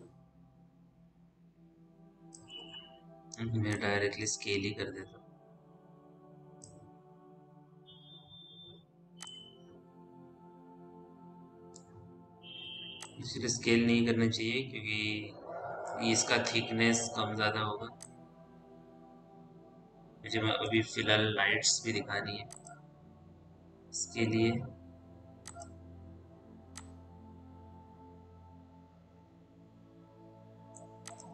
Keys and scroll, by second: 2.6 r, 12.7 w, 21.9 p.